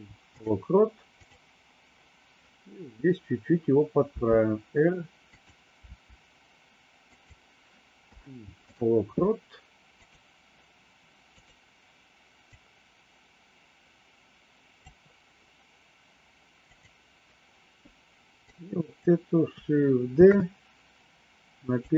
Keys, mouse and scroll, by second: 4.0 r, 5.9 r, 8.0 i, 9.9 click, 11.2 click, 12.4-14.7 drag, 16.6 click, 18.5 click, 20.1 shift+d.